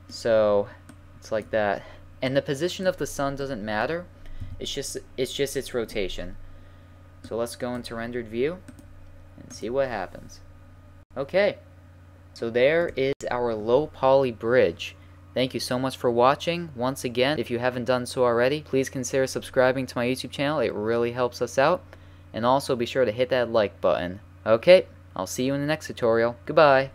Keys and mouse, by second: 0.9-1.3 drag, 3.0-5.0 middle drag, 4.4 a, 7.1 middle click, 7.2-10.3 drag, 10.5-14.2 middle drag.